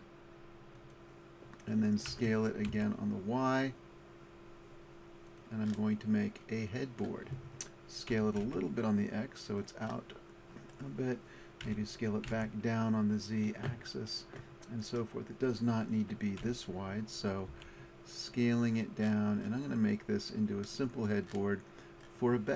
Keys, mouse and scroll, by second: 0.8-2.8 drag, 2.1 s, 5.4-7.5 drag, 7.5 middle click, 8.1 s, 9.6-11.7 drag, 11.7 s, 14.8-17.2 drag, 16.4 s, 18.8-19.8 drag.